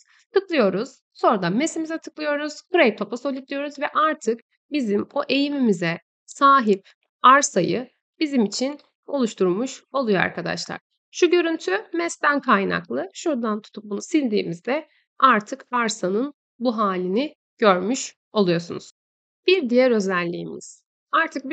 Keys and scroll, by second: 3.7 Escape, 12.3 Tab, 13.5 Delete.